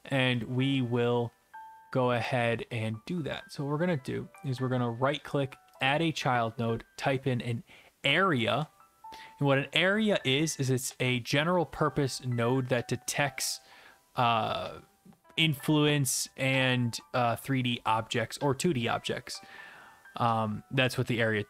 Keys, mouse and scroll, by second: 0.4-2.2 drag, 2.3-3.3 drag, 4.4-5.8 right drag, 5.8-7.0 drag, 7.7-9.1 typing.